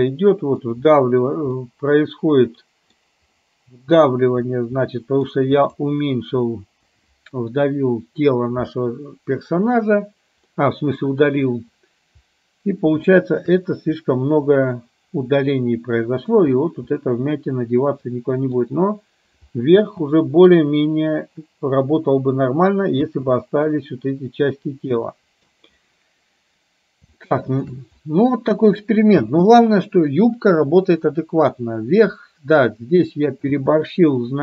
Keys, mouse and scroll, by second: 1.7-3.0 middle drag, 3.5-4.1 middle drag, 5.0-5.3 middle drag, 5.6 click, 10.6-11.3 middle drag, 13.2 shift+middle drag, 14.2-16.3 middle drag, 17.0-18.6 middle drag, 19.8 space, 23.1 space, 23.5-23.8 middle drag, 25.0-25.5 middle drag, 27.2-27.6 shift+middle drag, 28.1-28.8 middle drag, 29.3 space, 33.6 space.